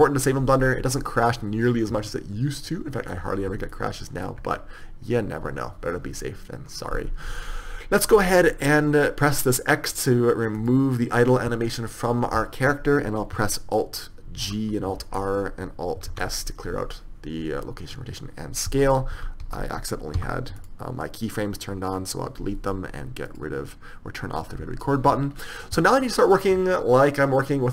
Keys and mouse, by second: 1.6-2.9 middle drag, 11.0 click, 14.8 alt+g, 15.4 alt+r, 16.4 alt+s, 21.0 z, 21.0 x.